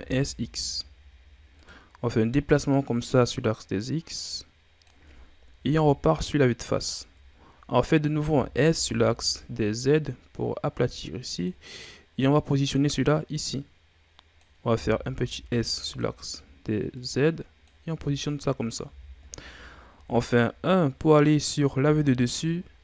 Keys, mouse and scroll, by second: 2.3-5.4 drag, 5.7 KP_1, 6.9-7.3 ctrl+scroll down 5, 7.3-8.3 scroll up 3, 8.3 s, 12.2-14.7 drag, 14.7 s, 16.9 click, 17.9 z, 18.1-18.4 scroll down 4, 18.4 middle click, 18.8 z, 19.9 KP_7, 21.8 z.